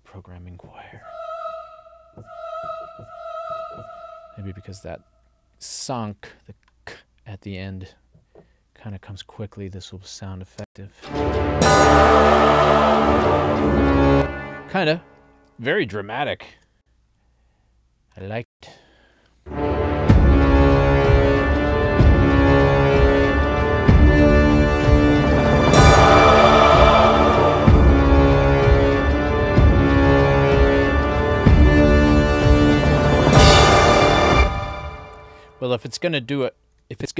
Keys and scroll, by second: 10.7 space, 14.1 space, 16.5 ctrl+alt+l, 18.5 space, 34.3 space, 37.0 ctrl+alt+l.